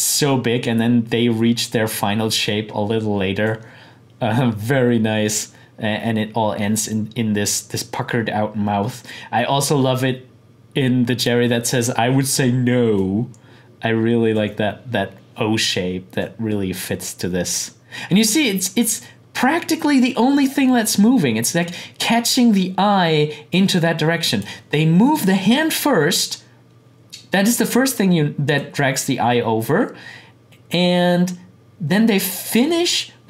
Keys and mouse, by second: 7.4-26.2 drag, 28.5-33.2 drag.